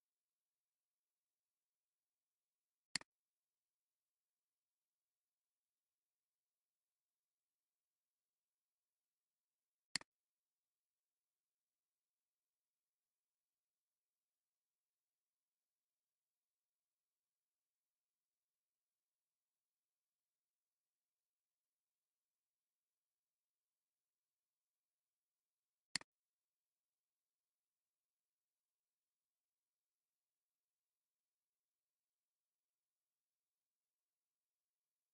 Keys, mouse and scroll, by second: 4.4-6.9 typing, 7.2 Return, 13.3 scroll down 1, 15.9 scroll down 1, 28.0 scroll down 1, 29.1 scroll up 1, 31.1 scroll down 1, 31.8 scroll down 1.